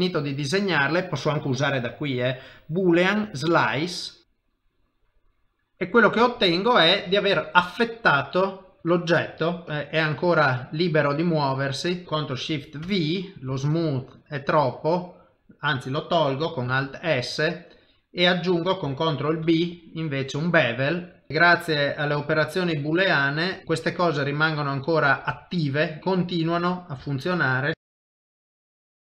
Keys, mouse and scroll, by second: 1.8 click, 5.7 middle click, 7.3 ctrl+middle click, 7.7 middle click, 9.6 g, 12.0 middle click, 12.0 middle click, 12.0 click, 12.8 ctrl+shift+v, 21.3 middle click, 21.3 click, 21.3 g, 23.6 middle click, 24.6 click, 25.3 g, 27.1 shift+click, 28.1 g.